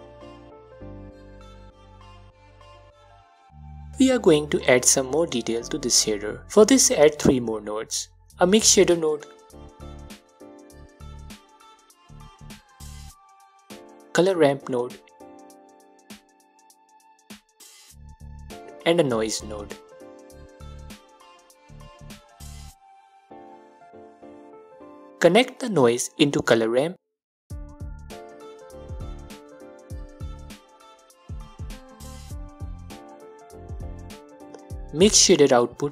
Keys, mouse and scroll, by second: 3.2 middle click, 3.4-4.7 middle drag, 4.6 scroll down 2, 6.1 scroll up 1, 6.6 middle click, 7.3 click, 8.0 shift+a, 11.3 click, 11.8-12.4 middle drag, 12.4 click, 12.9 shift+a, 17.2 click, 17.4-18.1 middle drag, 17.8-18.1 scroll up 2, 18.1 click, 18.4-19.1 scroll down 2, 19.1 shift+a, 23.2 click, 23.7-25.3 middle drag, 24.3-25.3 scroll up 2, 25.3 drag, 26.4-27.8 middle drag, 26.9-27.8 scroll up 2, 27.8 click, 29.5 click, 30.5-31.6 middle drag, 31.6 click, 34.8 drag.